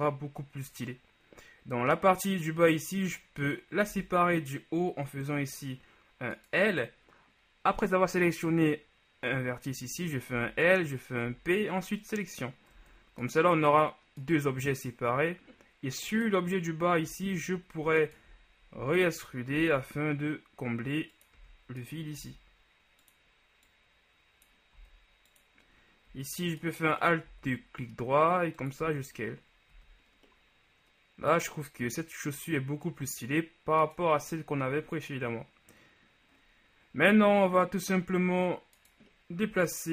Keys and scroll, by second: 4.1 l, 10.5 l, 10.7 l, 11.4 p, 12.9 Tab, 17.3 Tab, 17.9 alt+Tab, 18.9 e, 19.7 s, 25.0 s, 27.4 alt+s, 28.9 Tab, 29.9 a.